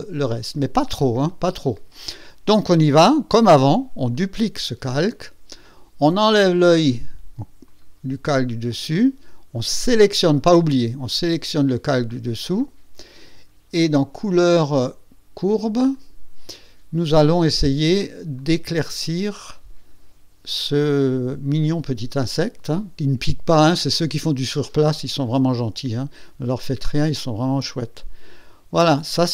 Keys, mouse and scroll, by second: 4.1 click, 7.6 click, 11.0 click, 14.1 click, 15.9 click, 17.1 click, 18.3-19.6 drag, 21.5-29.3 drag.